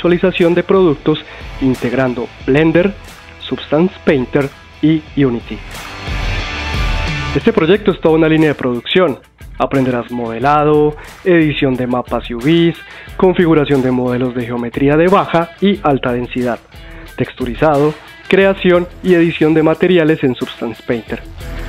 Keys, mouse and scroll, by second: 2.9 middle click, 3.0 shift+click, 3.1 shift+middle click, 3.2 ctrl+b, 4.0 middle click, 4.0 click, 4.1 shift+click, 4.1 middle click, 4.4 middle click, 5.1 middle click, 5.1 scroll down 3, 5.2 scroll up 2, 5.4 click, 5.7 click, 5.8 click, 5.9 middle click, 6.1 scroll up 1, 6.2 middle click, 6.7 ctrl+z, 6.7 middle click, 6.8 click, 6.9 middle click, 7.0 click, 7.1 Tab, 7.2 click, 7.2 3, 7.7 click, 8.1 click, 8.1 2, 8.2 middle click, 8.2 scroll up 2, 8.4 click, 8.5 click, 8.7 click, 8.8 click, 9.0 middle click, 9.0 scroll up 1, 9.3 shift+middle click, 9.6 click, 9.6 3, 9.6 e, 10.0 scroll down 3, 10.1 Tab, 10.2 middle click, 10.2-10.7 scroll up 2.